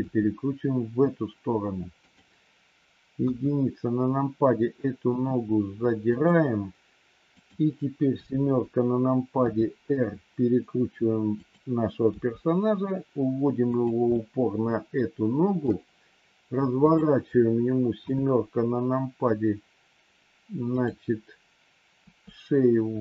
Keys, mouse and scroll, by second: 3.2 KP_1, 4.9 r, 8.0 KP_7, 9.3 r, 12.0 g, 14.0-15.7 middle drag, 16.8 click, 17.9 KP_7, 21.9 r.